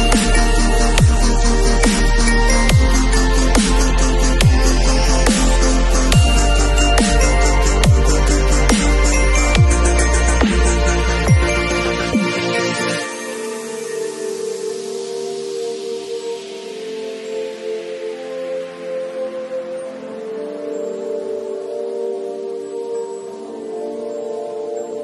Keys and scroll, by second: 7.5 i, 7.8 Page_Up, 11.3 Delete, 14.3 alt+Delete, 14.6 alt+Delete, 17.0 alt+super+Delete, 17.1 alt+super+d, 17.3 super+v, 18.2 v, 20.9 space.